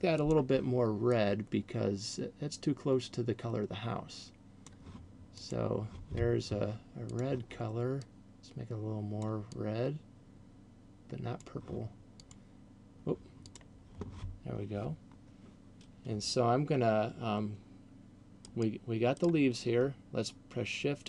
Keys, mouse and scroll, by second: 0.4 click, 7.1 click, 12.1 click, 13.4 click, 18.6 right click, 19.1 right click.